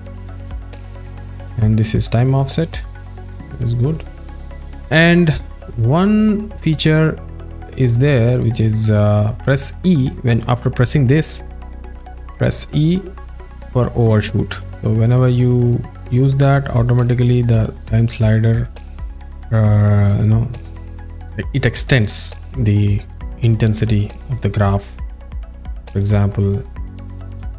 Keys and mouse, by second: 0.0 z, 2.1 click, 11.0 right click, 13.3 e, 25.9 click.